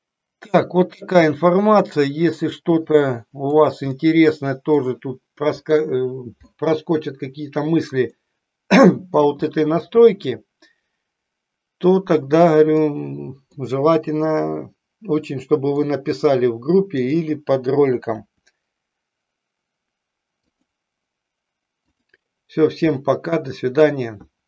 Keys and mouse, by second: 3.6 click, 8.1-9.3 middle drag, 9.9-13.0 middle drag, 13.8-15.8 middle drag, 18.8 r, 21.9 click, 23.0 middle click.